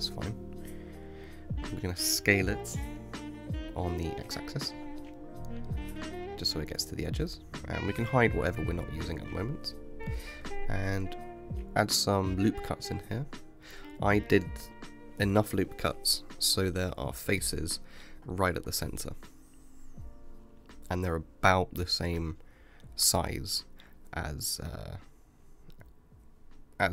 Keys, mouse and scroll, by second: 0.8 shift+middle click, 1.2 scroll down 2, 2.5 s, 7.5-8.9 middle drag, 8.9 click, 9.5-10.6 middle drag, 10.6 Tab, 12.3 ctrl+r, 20.1-21.7 middle drag, 21.7-23.4 scroll up 3, 23.4 3, 24.1 click, 24.8-26.9 middle drag.